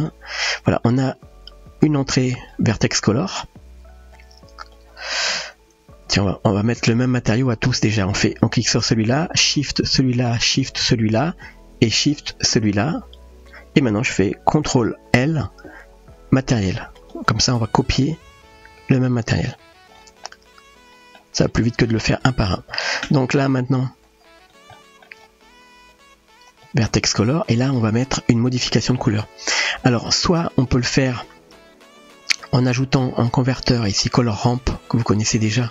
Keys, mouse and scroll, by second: 0.4 middle click, 2.0-2.5 drag, 4.2-4.9 drag, 6.3 click, 7.9-8.2 middle drag, 10.5 shift+click, 12.4 shift+click, 15.7 ctrl+l, 18.0-19.1 middle drag, 20.3-21.3 middle drag, 22.7 click, 24.1 click, 24.8 middle click, 25.9-26.6 drag, 31.5 shift+a.